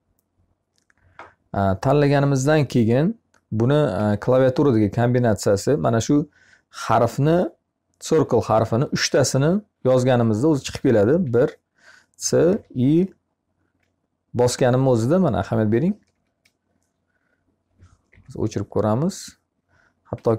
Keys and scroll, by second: 3.4 Escape, 10.7 c, 15.5 BackSpace, 20.0 Escape.